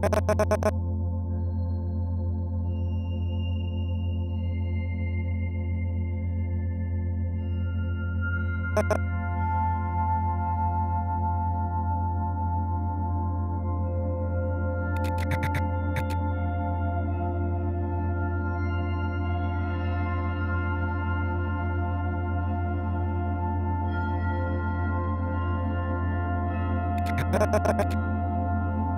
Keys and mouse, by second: 1.7 ctrl+alt+click, 2.1 alt+click, 4.6 =, 4.8 -, 5.9-6.7 drag, 8.7 click, 10.0 Right, 10.0-15.4 drag, 10.0 space, 15.9 click, 16.6 click, 17.1 click, 17.6-19.7 drag, 21.1 i, 21.2 click, 22.3 click, 23.7 g, 24.8 click, 26.0-28.9 drag.